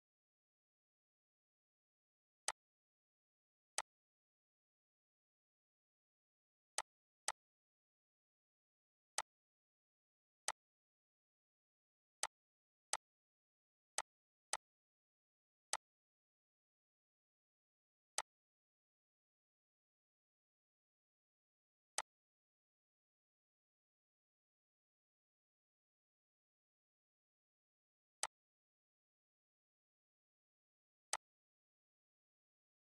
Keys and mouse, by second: 2.1 click, 6.4-17.5 drag, 17.8-30.7 drag.